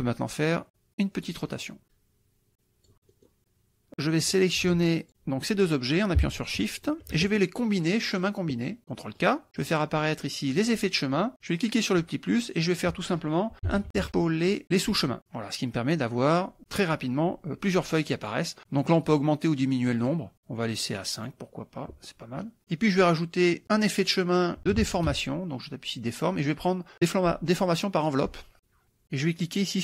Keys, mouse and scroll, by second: 0.2-1.5 drag, 1.8 KP_Subtract, 2.5 click, 3.1 middle click, 4.6 ctrl+click, 6.8 shift+click, 8.2 click, 9.2 click, 9.6 click, 10.5 click, 11.6 click, 13.3-14.7 typing, 14.9 click, 18.8 click, 19.9 click, 21.2 click, 22.3 middle click, 23.6 click, 24.5-25.7 typing, 28.0 click.